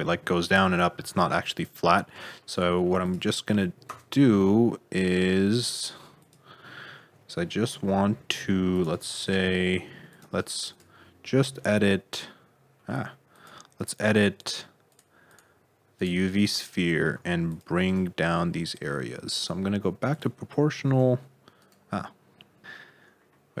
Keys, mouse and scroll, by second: 0.9 alt+z, 1.3 middle click, 1.8-2.2 scroll down 3, 2.2 shift+middle click, 3.0 click, 3.8 Tab, 4.2 middle click, 5.2-5.6 scroll up 2, 5.6 2, 6.2 click, 6.6 middle click, 7.3 middle click, 8.3 c, 9.1 click, 9.7 c, 10.7 click, 11.0 middle click, 11.4 c, 16.7 middle click, 17.1 c, 18.2 middle click, 20.1 click, 20.7 g, 22.1-22.6 scroll down 1, 22.6-23.1 scroll up 4, 23.1-23.6 scroll down 10.